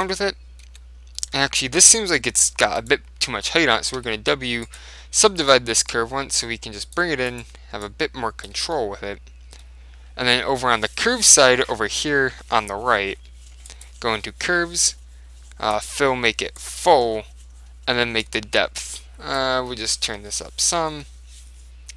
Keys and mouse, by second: 0.0 Tab, 0.1 middle click, 0.8 Tab, 2.3 middle click, 3.0-4.6 right drag, 4.2 w, 5.5-7.2 right drag, 6.0 click, 7.4 right click, 7.7 click, 8.6 Tab, 9.1 right click, 9.3 click, 9.5 right click, 9.5 click, 9.6 right click, 9.7 click, 9.9 middle click, 13.8 click, 15.8 click, 17.2 middle click, 17.6 click, 18.3 click, 19.8-21.9 middle drag.